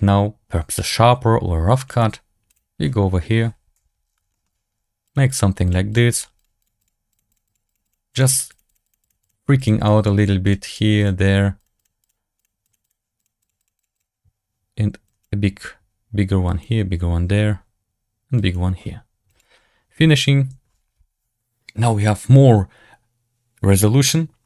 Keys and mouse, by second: 2.4 click, 3.7 KP_7, 4.2 shift+middle click, 5.0 click, 5.2 click, 5.6 click, 5.8 click, 6.3 click, 6.5 click, 6.7 click, 7.0 click, 7.2 click, 7.4 click, 7.6 click, 7.8 click, 8.0 click, 8.2 click, 8.4 click, 8.6 click, 8.7 click, 8.9 click, 9.1 click, 9.5 click, 9.7 click, 9.9 click, 10.1 click, 10.3 click, 10.6 click, 10.9 click, 11.5 click, 11.7 click, 11.9 click, 12.3 click, 12.5 click, 12.7 click, 13.1 click, 13.3 click, 13.5 click, 13.7 click, 13.8 click, 15.0 click, 16.4 click, 18.3 click, 19.2-23.4 drag.